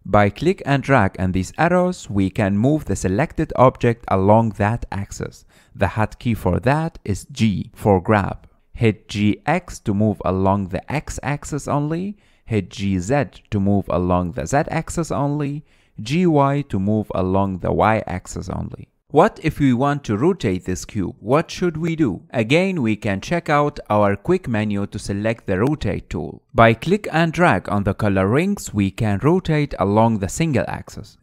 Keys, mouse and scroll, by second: 0.0-1.4 middle drag, 1.4 click, 2.5 click, 3.7 click, 4.3 ctrl+z, 4.6 ctrl+z, 5.0 ctrl+z, 5.5-7.7 middle drag, 7.7 g, 9.7 g, 13.1 g, 16.5 g, 22.4-24.4 middle drag, 26.5-28.3 drag, 29.8 click, 30.7 click.